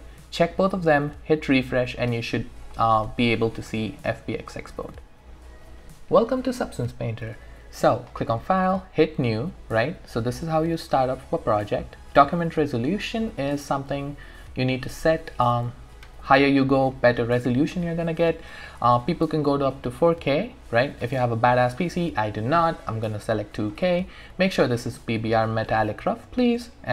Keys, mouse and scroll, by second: 2.6 click, 8.1-13.0 drag, 23.3 click.